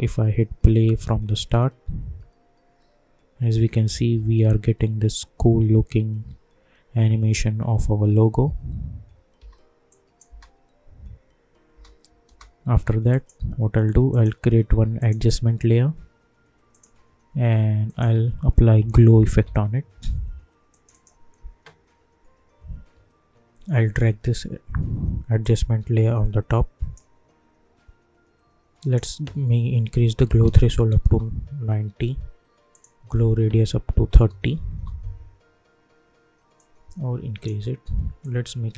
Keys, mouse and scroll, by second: 9.3 space, 9.8 click, 10.2 space, 13.1 click, 14.1 right click, 15.1 click, 18.1 ctrl+a, 18.5-19.9 typing, 20.7 click, 25.4-28.7 drag, 31.0 Return, 32.7 click, 34.6 Return, 36.5-38.7 drag.